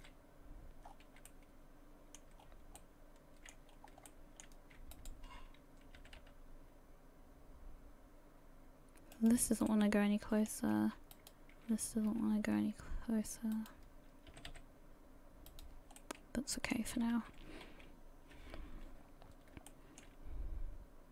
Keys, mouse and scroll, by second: 0.0 a, 0.9-1.4 scroll down 6, 1.3 middle click, 2.4-2.8 scroll up 2, 2.8 middle click, 3.7 scroll up 2, 4.1 shift+middle click, 4.9 alt+right click, 6.0 g, 9.7 middle click, 11.1 alt+right click, 12.1 g, 14.3 g, 16.0 middle click, 16.9 a, 17.1 a, 17.7 KP_1, 19.1-19.6 scroll up 2, 19.7 shift+middle click.